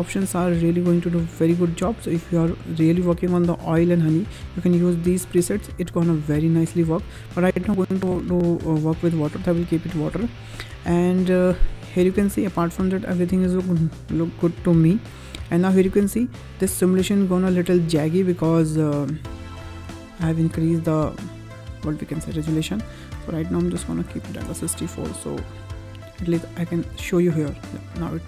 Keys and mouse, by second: 11.9 space, 16.0 space, 23.2-24.5 drag, 26.3 drag, 26.8 space.